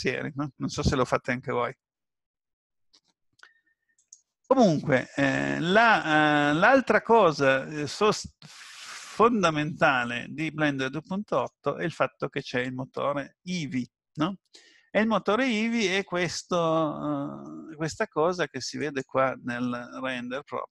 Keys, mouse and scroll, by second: 5.3-5.7 scroll down 3, 6.3 scroll down 1, 7.5 middle click, 18.8 click.